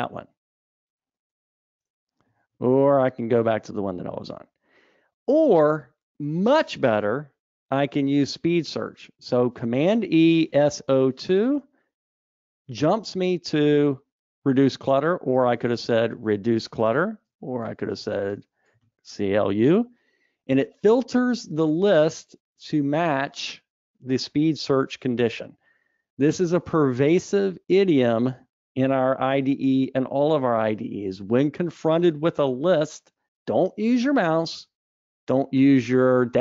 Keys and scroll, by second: 3.2 super+e, 10.9 super+e.